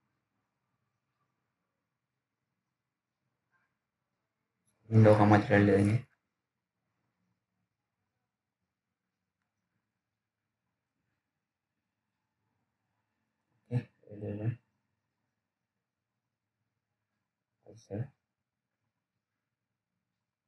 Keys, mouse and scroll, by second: 0.6 click, 2.3 right click, 2.8 click, 10.9 right click, 11.5 click, 11.5 click, 11.8-12.4 scroll down 1, 12.8 ctrl+s, 14.2 click.